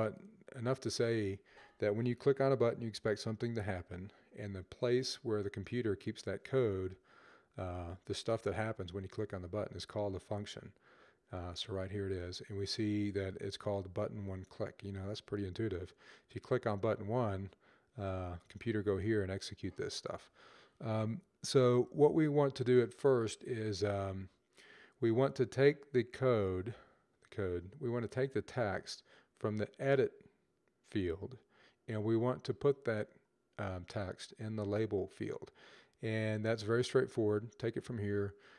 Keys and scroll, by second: 21.0 Left.